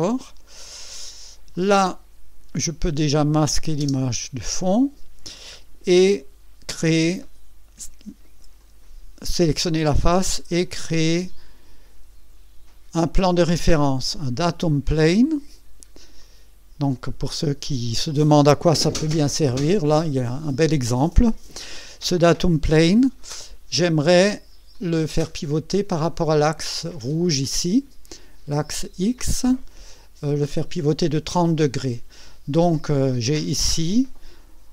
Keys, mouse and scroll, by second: 0.9 scroll down 1, 1.5-2.6 drag, 3.4 click, 3.8 space, 4.4-4.7 scroll down 2, 4.9 scroll up 2, 5.3 scroll down 2, 5.9-6.5 right drag, 6.7 right click, 8.6 click, 13.4 click, 15.5-15.9 scroll up 1, 16.2-17.1 right drag, 23.3-24.5 drag, 24.7-26.0 drag, 28.8 right click, 30.2 right click.